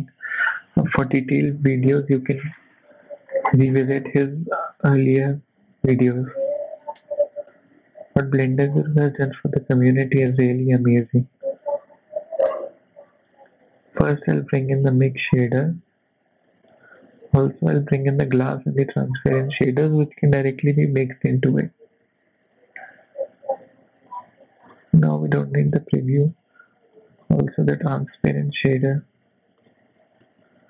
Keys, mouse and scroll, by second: 2.5 scroll up 5, 2.7 middle click, 3.3 scroll up 1, 3.4 middle click, 3.8 scroll up 1, 4.1 middle click, 4.6 shift+a, 8.7 scroll down 4, 9.2 click, 10.2 x, 10.4 click, 10.9 shift+a, 15.9 click, 21.8 middle click, 21.8 shift+a, 25.6 click, 26.0 middle click, 26.6 click, 27.2 shift+a.